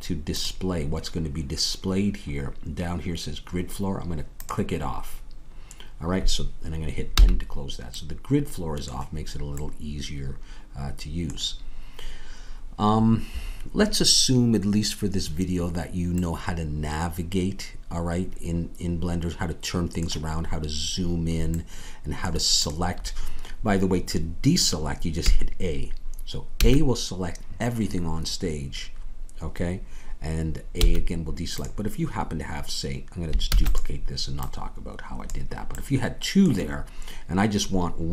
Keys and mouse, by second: 7.1 n, 25.2 a, 26.5 a, 30.7 a, 33.4 shift+d, 34.3-36.7 drag.